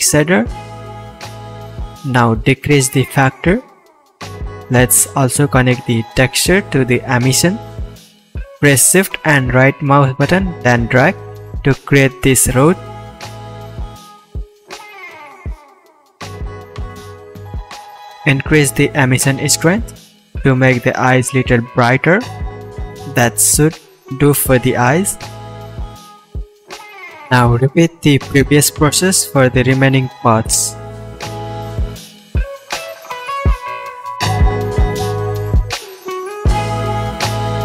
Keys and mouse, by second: 6.4-16.3 drag, 17.0-30.5 drag, 29.4 h, 30.2 ctrl+z, 30.8 h, 31.7-36.0 drag, 36.1 click, 36.2-37.3 drag, 36.9 right click, 37.3-37.6 middle drag.